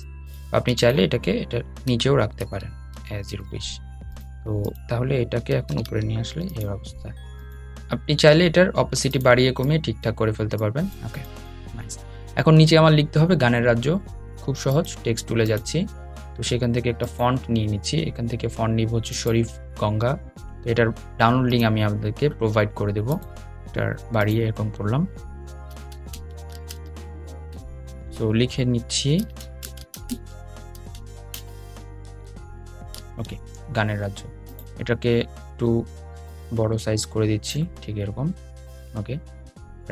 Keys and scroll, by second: 4.7 super+}.